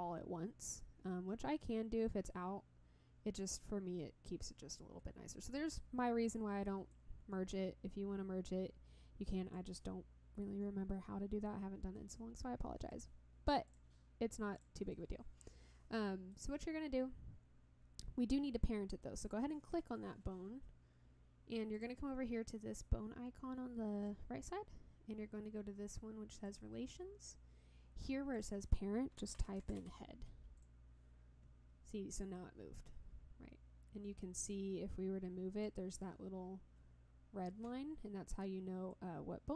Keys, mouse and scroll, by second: 6.9-9.5 drag, 11.9 middle click, 13.6 click, 14.5 click, 14.9-16.3 middle drag, 21.7 click, 26.4 click, 28.3-30.6 drag, 34.5-35.6 drag, 37.8-38.2 scroll down 1, 38.9-39.5 drag.